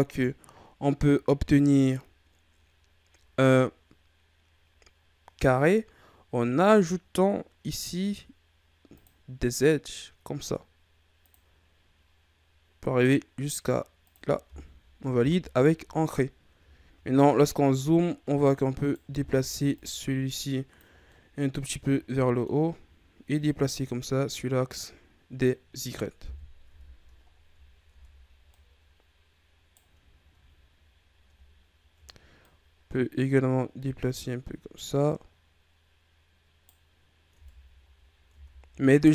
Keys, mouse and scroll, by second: 16.0-16.3 scroll up 1, 16.7-17.1 shift+scroll down 4, 17.1 scroll up 1, 17.8 right click, 19.1 ctrl+z, 19.7-20.9 drag, 20.9 scroll down 1, 21.1 middle click, 21.6-21.9 scroll down 1, 22.2-23.3 middle drag, 23.3-26.2 drag, 26.2 KP_1, 26.6 Tab, 27.3-27.9 ctrl+scroll up 6, 27.9 Tab, 28.5 right click, 30.1-30.9 ctrl+scroll up 3, 31.6-32.4 ctrl+scroll up 1, 32.4 right click, 37.3 Tab, 37.9-38.3 scroll down 2, 38.3 Tab, 38.6-39.1 scroll up 3.